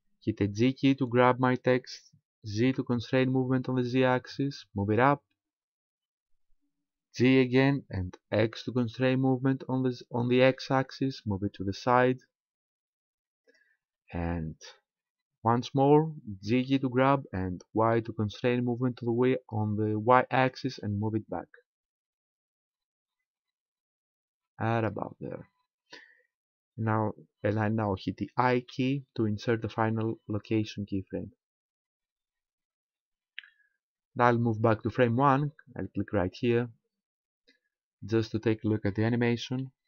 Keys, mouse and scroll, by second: 0.6 g, 5.0 ctrl+click, 7.2 g, 13.6 ctrl+click, 16.6 g, 24.9 ctrl+click, 28.6 i, 36.4 click.